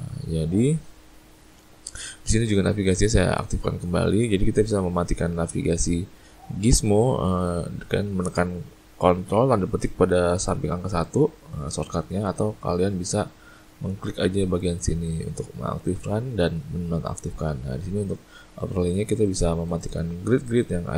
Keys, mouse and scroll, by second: 3.9 click, 11.0 ctrl+`, 11.6 ctrl+`, 12.0 ctrl+`, 13.0 ctrl+`, 14.1 click, 14.7 click, 15.1 click, 17.2 click, 19.3 click, 19.7 click, 20.5 click.